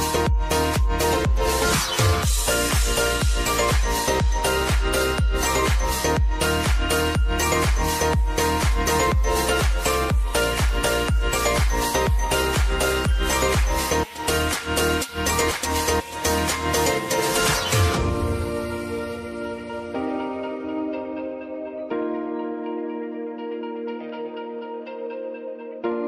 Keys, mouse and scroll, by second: 0.4 click, 1.2 v, 2.2 Down, 3.7 Right, 6.8 t, 7.4 click, 10.5 Down, 11.1 Right, 12.0 click, 12.8 ctrl+d, 13.8 click, 14.8 Down, 16.4 Right, 18.2 Down, 18.8 Right, 20.5 click, 20.9 ctrl+d, 21.5 click, 22.3 Down, 24.2 Right.